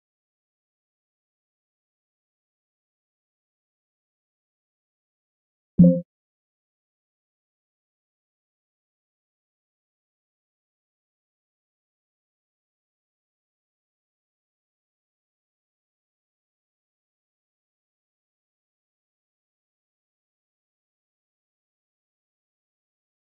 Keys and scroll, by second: 0.7 ctrl+g, 1.6 ctrl+q, 1.7 ctrl+k, 1.8 ctrl+u, 12.8 ctrl+a, 15.0 ctrl+q, 15.1 ctrl+k, 15.1 ctrl+u, 17.5 ctrl+q, 17.5 ctrl+k, 17.6 ctrl+u, 18.3 ctrl+q, 18.4 ctrl+k, 18.5 ctrl+u, 20.1 ctrl+q, 20.2 ctrl+k, 20.4 ctrl+u.